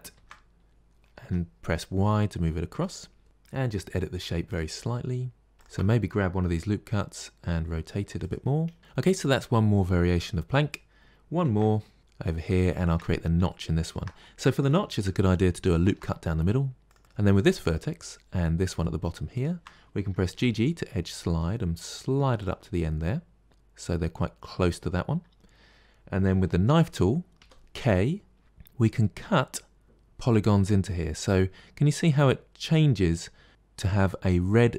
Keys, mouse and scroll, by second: 0.0 shift+d, 3.2 Tab, 3.7 g, 5.4 click, 6.3 r, 8.8-11.3 middle drag, 11.3 shift+d, 12.7 Tab, 13.4-15.7 shift+middle drag, 15.7 ctrl+r, 17.0 middle click, 17.5 click, 17.9-19.2 middle drag, 19.2 shift+click, 20.1 g, 22.6-24.1 middle drag, 24.1 scroll up 2, 27.2 k.